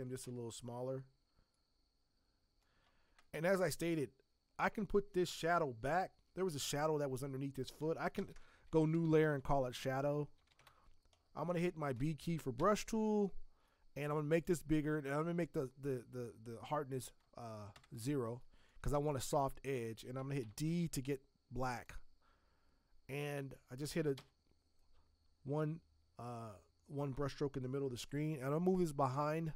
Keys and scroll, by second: 8.2 ctrl+shift+n, 8.8-12.6 typing, 20.0 z, 20.5 d, 24.2 v.